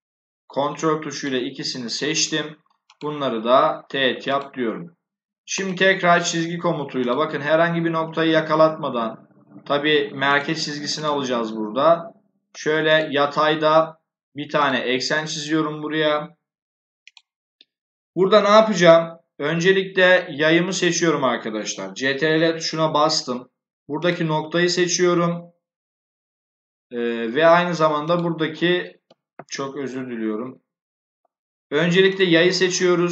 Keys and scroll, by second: 9.4 Escape, 29.8 Escape.